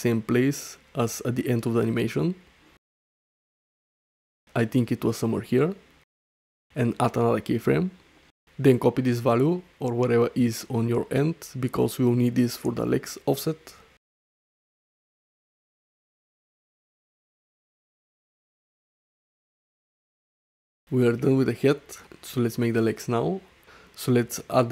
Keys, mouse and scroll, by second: 0.6 click, 0.9-3.2 right drag, 3.5-4.2 middle drag, 4.6 shift+middle click, 4.9 middle click, 5.6 middle click, 6.6 shift+click, 9.6-12.1 drag, 13.0 shift+middle click, 13.6 space, 19.5 shift+Right, 19.5 space, 19.5 middle drag, 20.0-20.5 middle drag, 20.9-21.2 middle drag, 21.4 shift+middle drag, 24.0 i.